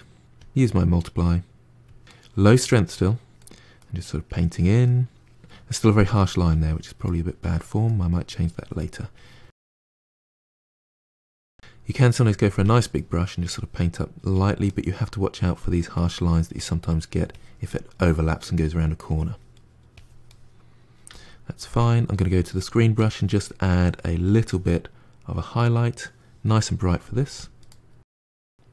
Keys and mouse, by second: 2.0 middle click, 2.8 click, 3.4 middle click, 3.6 click, 4.0 middle click, 4.2 click, 4.6 middle click, 4.8 click, 5.0 middle click, 5.4 click, 5.6 middle click, 5.8 click, 6.1 middle click, 6.3 click, 6.4 middle click, 7.0 click, 7.2 middle click, 7.4 click, 7.6 middle click, 7.7 click, 7.9 middle click, 8.1 click, 8.3 middle click, 8.5 click, 8.6 middle click, 8.8 click, 9.0 middle click, 9.1 click, 9.3 middle click, 9.5 click, 9.8 middle click, 10.4 click, 10.6 middle click, 10.7 click, 10.9 middle click, 11.1 click, 11.2 f, 11.5 middle click, 12.0 click, 12.8 middle click, 13.3 click, 13.7 middle click, 14.2 click, 14.6-16.4 middle drag, 16.4 click, 16.8 middle click, 17.2 click, 17.6-19.0 middle drag, 19.0 click, 19.5 middle click, 19.8 click, 20.2 middle click, 21.0 f, 22.8-26.3 drag, 26.3 middle click, 27.0 f, 27.6 middle click, 28.0-28.7 drag.